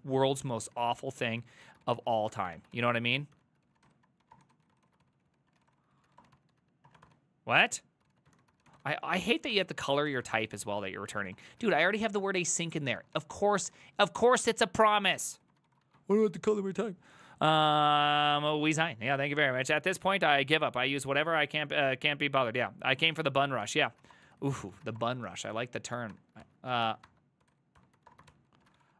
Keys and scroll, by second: 0.0-13.7 typing, 10.9 ctrl+c, 15.4-16.1 typing, 23.2 alt+{, 23.6 ctrl+c, 23.7 ctrl+c, 23.8-28.9 typing.